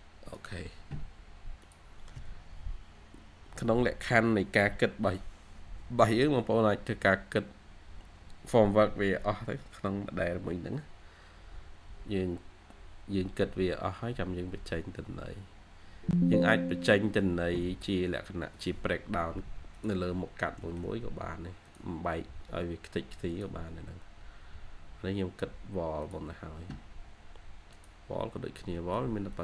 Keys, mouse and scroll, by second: 20.0-20.5 scroll up 1, 28.1 scroll down 1, 28.7 middle click, 29.1-29.4 scroll up 1.